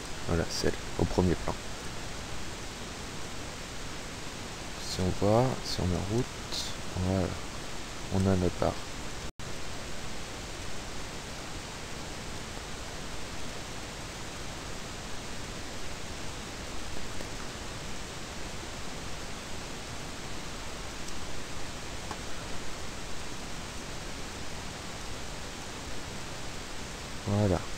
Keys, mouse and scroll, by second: 0.0 click, 0.6 click, 1.8 click, 2.8 click, 4.5 click, 6.0 p, 6.5 Escape, 9.3 click, 10.6 click, 11.2 click, 13.3 click, 14.3-15.7 drag, 16.2 click, 17.2 click, 18.0-20.6 typing, 21.9 Escape, 23.2 click, 23.8 click, 25.0 click, 25.7 click, 26.3 click.